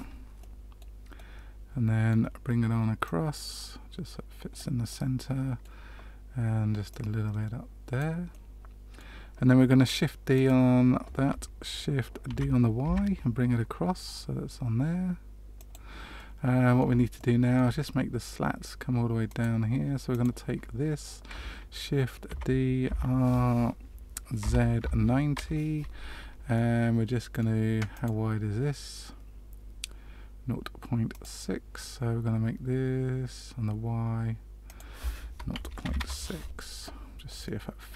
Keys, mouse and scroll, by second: 0.3 middle click, 1.1 middle click, 3.0 click, 4.9 middle click, 6.8 click, 8.2 middle click, 10.3 click, 12.2 shift+d, 16.1 middle click, 17.1 shift+middle click, 19.2 click, 20.0 click, 22.2 shift+d, 26.5 middle click, 27.9 click, 34.6 click, 37.4 middle click.